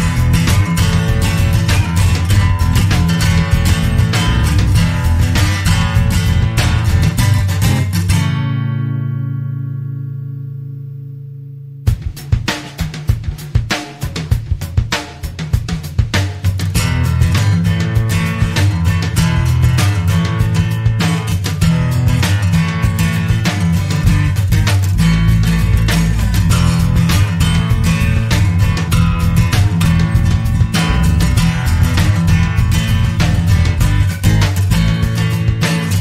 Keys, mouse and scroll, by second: 5.5 ctrl+z, 6.1 ctrl+click, 7.4 click, 9.0 click, 10.8 right click, 12.2 click, 13.4 click, 13.9 click, 15.9-18.5 drag, 18.8 0, 19.4 scroll down 2, 20.0-20.3 scroll up 2, 20.7 click, 21.5 click, 24.1 click, 24.8 click, 25.6 click, 26.3 click, 28.1 F2, 29.6 t, 30.7 BackSpace, 30.9 Caps_Lock, 31.6 a, 32.0 n, 32.6 k, 33.6 click.